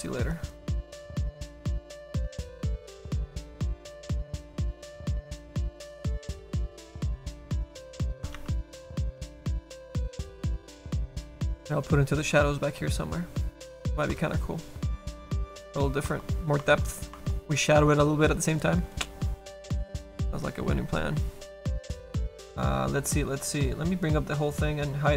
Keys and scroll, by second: 10.5 ctrl+z.